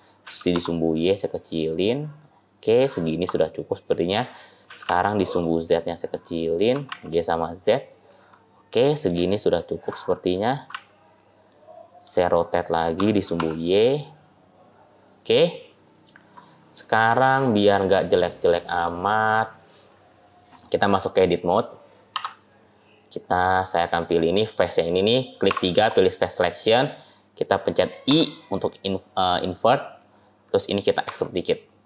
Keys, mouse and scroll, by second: 0.1 s, 2.1 middle click, 3.0 shift+scroll down 2, 4.5 s, 6.7 g, 8.2 middle click, 9.3 shift+middle click, 9.9-10.4 scroll up 2, 10.4 g, 11.4 middle click, 12.8 r, 16.2 middle click, 17.0 middle click, 17.8-18.2 scroll up 3, 18.2 shift+middle click, 18.3 shift+middle click, 18.9-19.8 scroll up 4, 19.6 click, 20.3 click, 22.0 Tab, 23.3 click, 24.0 click, 25.3 3, 25.7 click, 27.9 i.